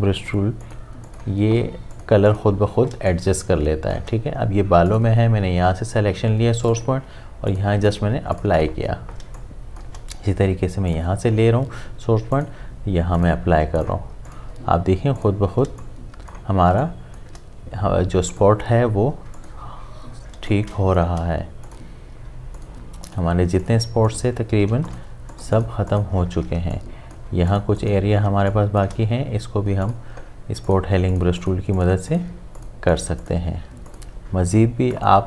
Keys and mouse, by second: 2.9 space, 3.1 click, 3.4 space, 4.9 click, 9.2 space, 9.4 click, 9.7 space, 10.9 click, 15.7 space, 15.8 click, 16.2 space, 18.3 click, 20.3 space, 20.5 click, 20.9 space, 21.6 click, 24.7 space, 24.9 ctrl+click, 26.6 ctrl+space, 26.7 click, 27.1 space, 27.5 ctrl+click, 28.3 space, 28.5 click, 28.7 space, 29.8 click.